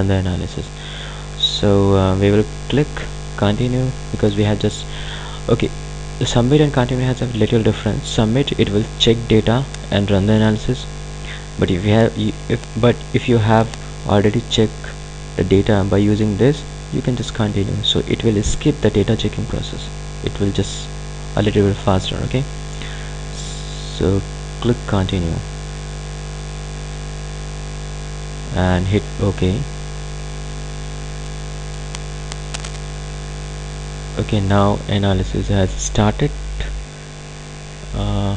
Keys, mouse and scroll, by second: 26.2 click, 31.5 click.